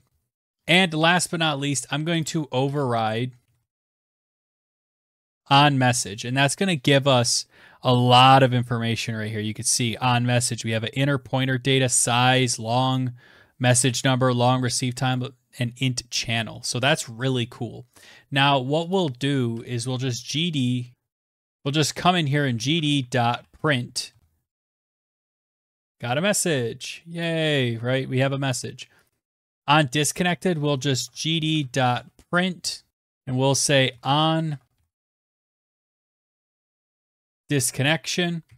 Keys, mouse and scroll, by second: 0.3 Home, 0.5 click, 0.5 scroll, 0.8 click, 1.2 Return, 1.7-5.1 typing, 11.4 click, 13.7 click, 17.4 click, 18.1 Return, 18.3-25.0 typing, 25.7 click, 26.1-26.9 typing, 27.0 click, 27.6 click, 28.0 Return, 29.0-37.4 typing, 37.8 shift+click, 38.1 ctrl+c.